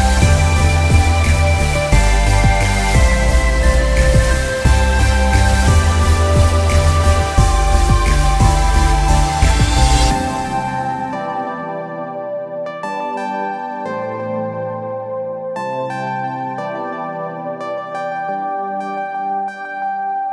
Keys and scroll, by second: 4.7 g.